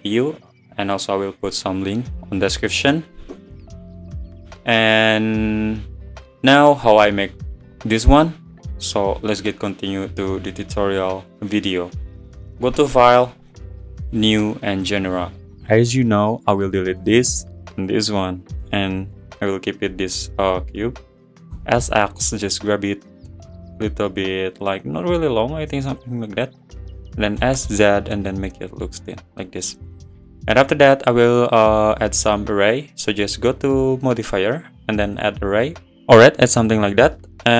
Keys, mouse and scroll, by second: 6.4 scroll up 4, 13.3-15.1 drag, 16.7 click, 18.5 x, 19.1 click, 19.9 `, 21.5 s, 26.3 `, 27.4 s, 29.6 scroll down 1, 29.8-30.4 middle drag, 30.4 `, 31.9 click, 32.7 click, 34.2-35.1 drag, 35.8 click, 36.6-37.5 drag.